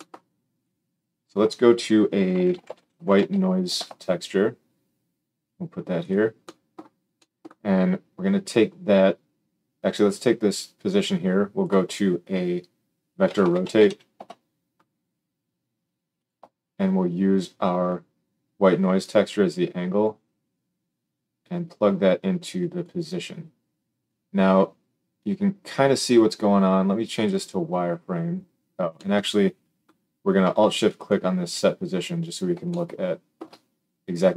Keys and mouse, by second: 6.1-10.5 middle drag, 10.5-16.2 drag, 16.2-17.8 middle drag, 17.8-27.2 drag, 27.2-30.9 middle drag, 30.9 alt+shift+click, 31.0 alt+shift+middle click.